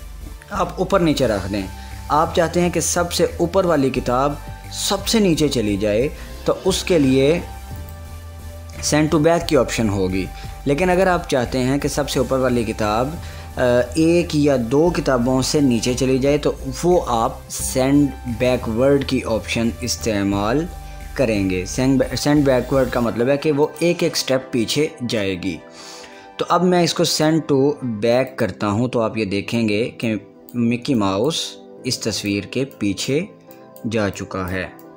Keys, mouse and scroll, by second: 8.5 click, 11.7 click, 20.6 click, 24.4 click, 27.8 click, 28.1-34.8 drag.